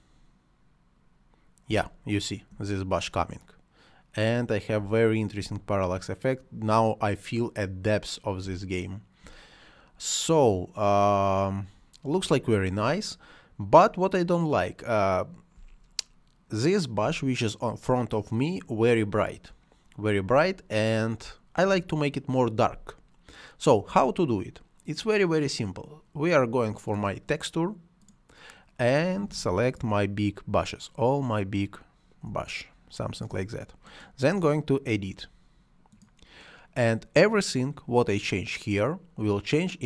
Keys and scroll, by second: 1.7 space, 4.7 space, 8.5 space, 12.3 space, 15.6 space, 20.3 space.